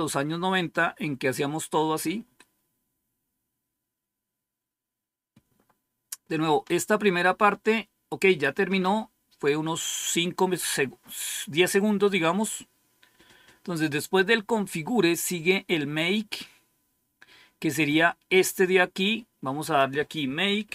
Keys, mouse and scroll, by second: 13.7 click, 14.6-15.9 scroll down 2, 15.9-17.4 scroll down 2, 19.7 click, 20.3-20.7 typing.